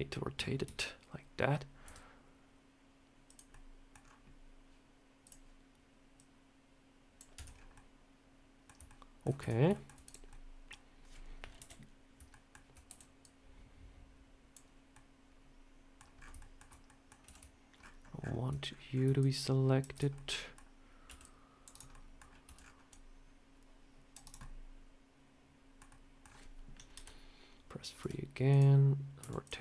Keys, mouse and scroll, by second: 0.5 KP_3, 1.7 r, 3.4 middle click, 3.9 scroll down 3, 5.1 click, 6.0 click, 7.2 Tab, 7.4 scroll down 3, 7.6 middle click, 8.7 shift+middle click, 9.3 Tab, 9.6 shift+middle click, 9.9 click, 10.2 middle click, 11.4 KP_7, 12.2 shift+middle click, 12.7 b, 14.8 middle click, 16.0 scroll up 5, 16.3 shift+middle click, 16.4 shift+scroll down 1, 16.7 middle click, 17.1 c, 20.0 middle click, 20.9 c, 21.8 middle click, 22.3 c, 24.3 middle click, 25.8 middle click, 26.8 KP_3, 27.9 r, 29.1 r.